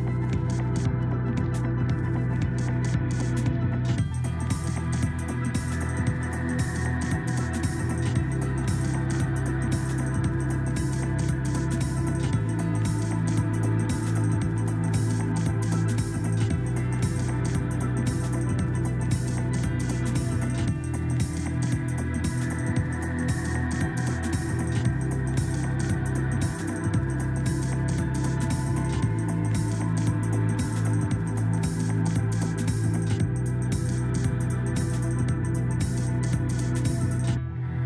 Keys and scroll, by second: 2.9 Escape, 4.7 Escape, 5.8 ctrl+z, 36.8 Escape.